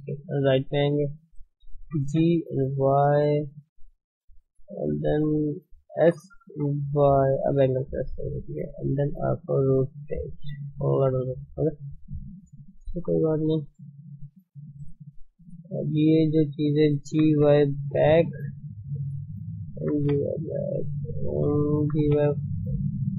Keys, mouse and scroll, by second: 0.2-0.5 scroll up 2, 0.9 shift+middle click, 1.8 g, 3.6 shift+z, 4.8 r, 6.0 s, 8.0 shift+z, 9.1 r, 11.2 scroll down 5, 11.6-15.6 middle drag, 11.6-12.1 scroll up 3, 15.6 click, 17.1 g, 19.0 click, 19.8 g, 21.1 click, 21.8 g.